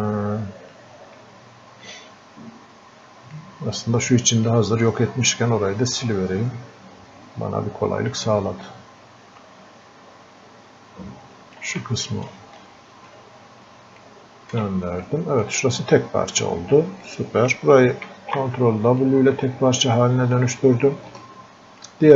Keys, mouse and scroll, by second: 1.9-4.5 drag, 4.5-13.1 drag, 13.1-15.0 ctrl+alt+shift+drag, 15.0-17.1 drag, 17.1 click, 18.1 ctrl+w, 19.0-21.2 drag, 21.2-22.1 ctrl+shift+drag.